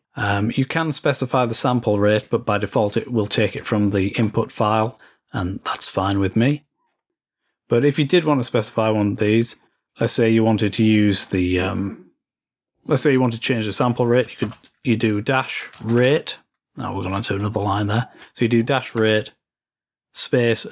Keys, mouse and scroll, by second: 0.0-0.8 scroll down 2, 1.1 click, 1.9 click, 3.3 click, 4.5 click, 6.6-7.1 scroll up 1, 9.5-11.7 scroll down 4, 13.0-15.6 drag, 17.2-18.6 drag.